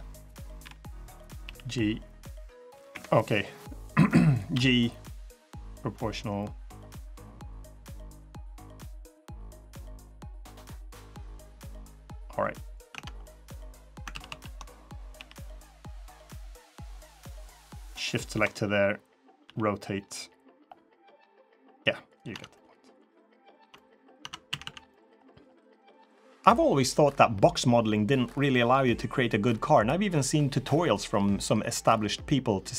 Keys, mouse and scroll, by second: 0.3 KP_3, 1.2 g, 4.3 g, 12.7 Tab, 13.0 middle click, 13.9 ctrl+z, 14.0 ctrl+z, 14.4 middle click, 14.9 g, 15.8 middle click, 16.9-17.4 scroll down 3, 17.6 middle click, 17.7 middle click, 17.7 ctrl+click, 17.7 scroll up 5, 18.3 middle click, 19.2 r, 22.1 Tab, 22.3 middle click, 22.8 scroll down 2, 23.2 click, 23.4 Tab, 23.5 middle click, 23.9 Tab, 24.2 a, 24.4 a, 24.6 middle click, 24.8-25.2 scroll up 5, 25.2 scroll down 7, 25.6 middle click, 25.9 scroll up 2.